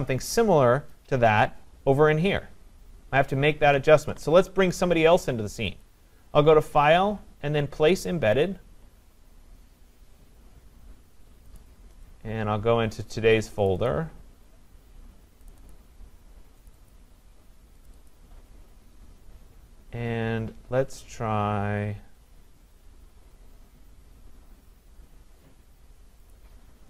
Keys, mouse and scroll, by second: 0.3-5.8 scroll, 0.9 click, 5.8 click, 8.5 click, 11.6 click, 13.7 click, 13.9 click, 15.5 click, 15.7 click, 16.8 click, 16.9 click, 17.9 click, 18.1 click, 21.4-22.4 scroll, 26.3 click.